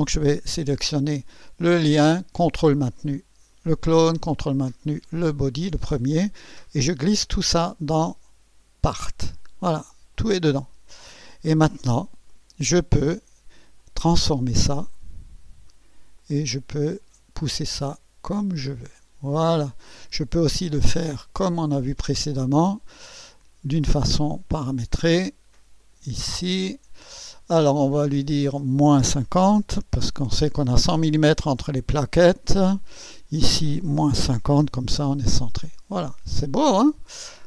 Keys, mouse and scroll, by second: 1.1 click, 3.5 ctrl+click, 5.1 ctrl+click, 6.9-9.0 drag, 10.1 click, 10.6 click, 11.1 click, 12.3 right click, 13.8 click, 16.1-17.7 drag, 18.4 click, 20.4 click, 22.5 click, 25.2 click, 25.8 click, 28.3 click, 29.3-30.7 typing, 32.8 click, 34.0 KP_Subtract, 34.3-34.9 typing, 36.5 scroll up 2, 36.9 scroll down 1.